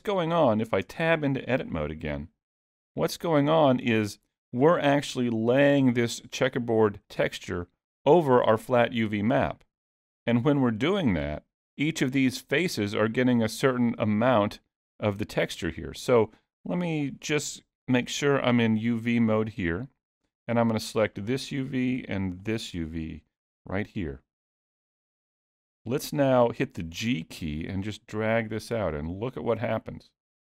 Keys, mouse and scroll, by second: 0.9 Tab, 3.3-3.8 scroll up 1, 18.0 click, 21.1 click, 22.4 shift+click, 23.7-24.2 scroll up 3, 24.1 middle click, 26.0 scroll down 1, 27.2 g.